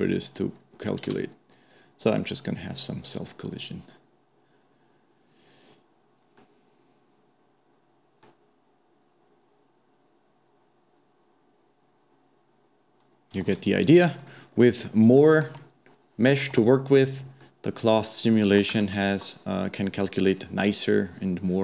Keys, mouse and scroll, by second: 0.6-1.1 scroll down 2, 1.1 space, 7.1-10.1 middle drag, 13.9-14.5 middle drag, 14.5-14.9 scroll up 1, 14.9 middle click, 15.6 Tab, 17.1 Tab, 17.5-18.9 middle drag, 18.9 shift+Left, 19.7-20.1 scroll down 1, 20.1-21.6 scroll up 1.